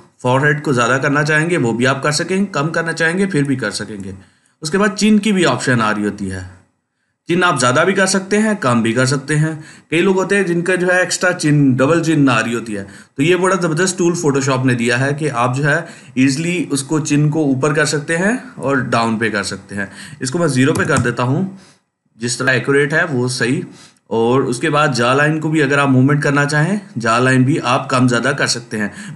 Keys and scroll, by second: 20.6 0, 20.8 Return.